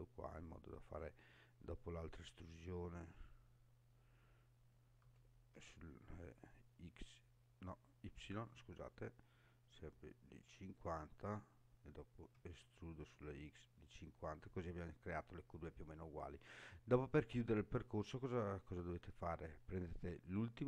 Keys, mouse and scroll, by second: 0.8 click, 5.0 e, 5.5 x, 8.4 y, 10.7 click, 12.3 e, 13.0 x, 15.0 click, 17.3 scroll up 1, 18.2 scroll down 1, 18.9 shift+middle click, 20.2 click.